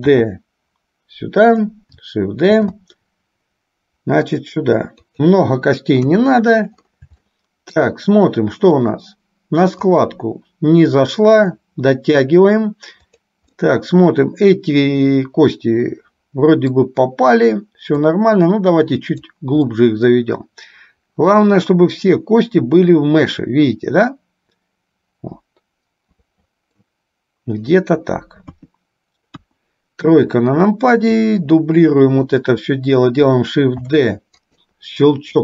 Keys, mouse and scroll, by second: 0.3 shift+d, 6.1 KP_3, 7.5 shift+middle click, 9.0 click, 10.3-11.6 drag, 13.3 click, 13.9-17.0 middle drag, 18.4-19.4 drag, 19.8-27.1 middle drag, 28.6 KP_2, 29.6 KP_1, 31.5-32.5 drag, 34.0 shift+d.